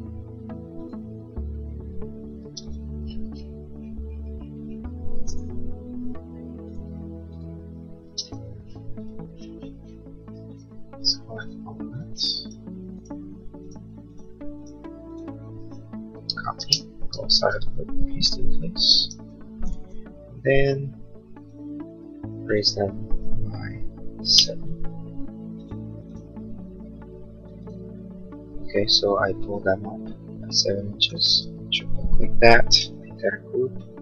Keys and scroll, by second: 2.5 space, 8.2 space, 16.4 ctrl+c, 16.7 space, 16.9 Escape, 24.3 7, 24.6 Return, 32.8 g.